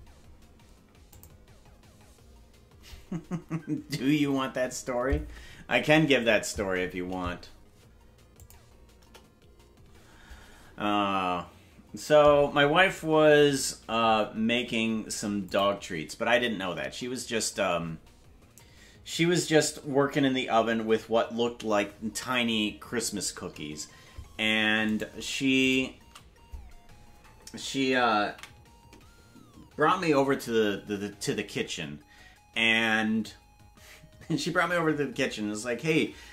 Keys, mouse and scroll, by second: 9.0 KP_0, 15.5 click, 25.1 right click, 25.8 shift+right click, 30.1 ctrl+s.